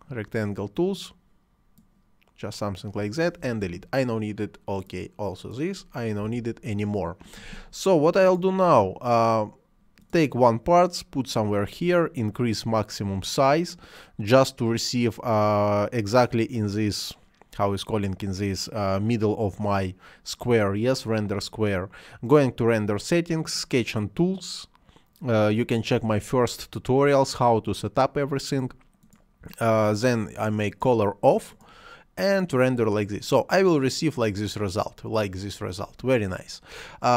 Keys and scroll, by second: 3.6 Delete, 6.3 Delete.